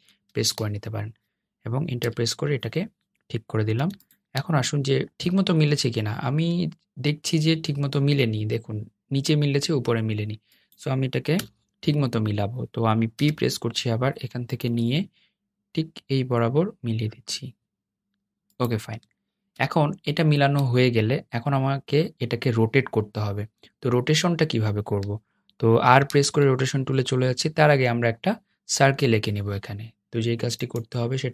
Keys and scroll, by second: 1.5 Return, 11.5 BackSpace, 13.5 p, 19.7 Return.